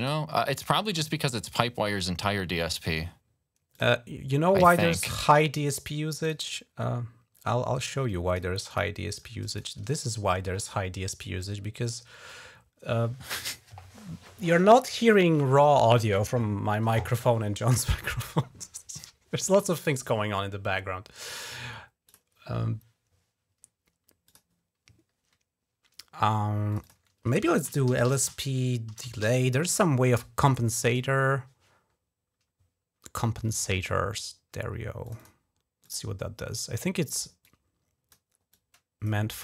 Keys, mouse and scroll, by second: 1.3 click, 3.5 click, 4.8 click, 6.0 click, 7.9 click, 8.5 click, 9.0 click, 10.1-10.4 ctrl+scroll up 2, 10.6 ctrl+scroll down 2, 21.0 click, 21.9 click, 24.0 click, 26.5 click, 26.6 click, 27.3 ctrl+a, 27.4-29.7 typing, 34.9 click, 35.0 click, 35.7 click, 37.2 click, 38.3 click.